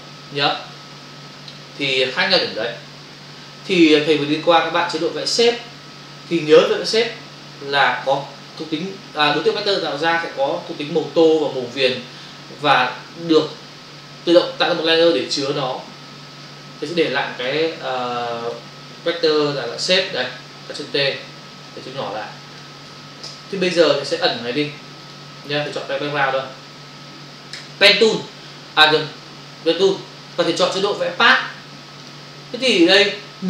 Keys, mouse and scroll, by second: 2.3 click, 2.4 click, 17.4 click, 18.3 click, 18.5 click, 19.7 click, 19.8 click, 20.8 ctrl+t, 21.8 alt+click, 23.2 Return, 23.9 click, 25.0 click, 25.1 click, 25.6 click, 30.4 click, 31.9 click, 32.1 click.